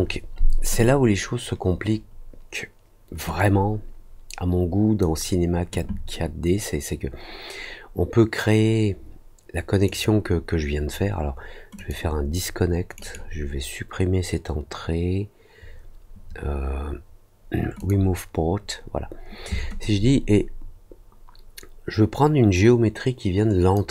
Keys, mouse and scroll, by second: 3.3-4.9 drag, 9.8 right click, 11.7 click, 12.9 right click, 17.7 click, 19.7-23.7 drag.